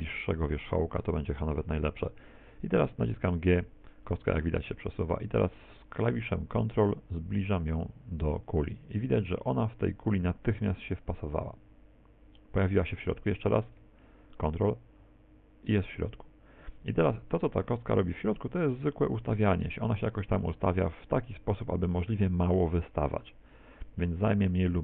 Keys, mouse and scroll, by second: 3.2 g.